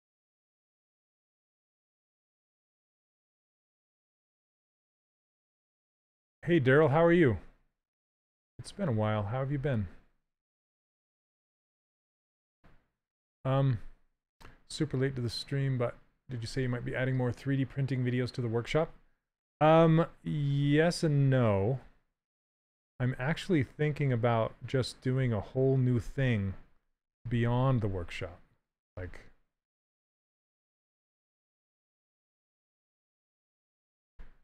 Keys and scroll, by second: 2.3 s, 5.2 s, 19.7 s, 34.1 shift+f.